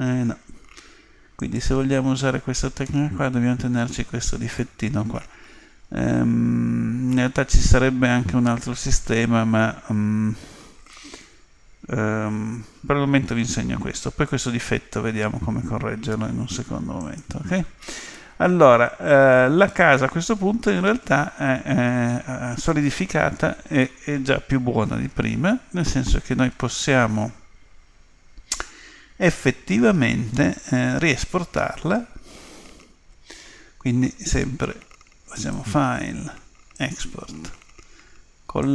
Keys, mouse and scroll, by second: 1.4-3.3 drag, 2.9-6.4 middle drag, 17.0-18.8 drag, 18.1-22.0 middle drag, 23.8-25.6 middle drag, 35.4-37.2 drag.